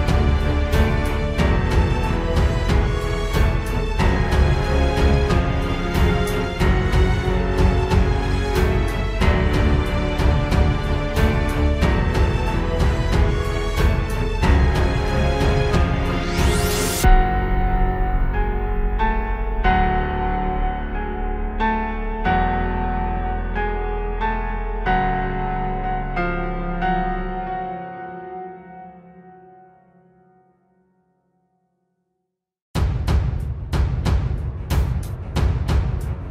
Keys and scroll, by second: 1.0 ctrl+space, 2.1 ctrl+j, 3.4 ctrl+z, 3.6 ctrl+e, 4.9 ctrl+space, 7.0 ctrl+space, 8.0 ctrl+z, 10.7 ctrl+z, 12.3 ctrl+space, 13.0 ctrl+space, 13.9 ctrl+space, 14.6 ctrl+space, 15.1 ctrl+space, 16.5 ctrl+space, 17.1 ctrl+space, 18.2 ctrl+space, 19.9 ctrl+space, 20.8 ctrl+space, 23.6 ctrl+z, 24.5 ctrl+z, 25.4 ctrl+space, 26.0 ctrl+space, 26.2 ctrl+z, 26.9 ctrl+j, 27.2 ctrl+space, 29.5 ctrl+shift+i, 30.6 ctrl+alt+z, 33.0 ctrl+z, 34.3 ctrl+space, 34.4 ctrl+z, 35.0 ctrl+z, 35.6 ctrl+space.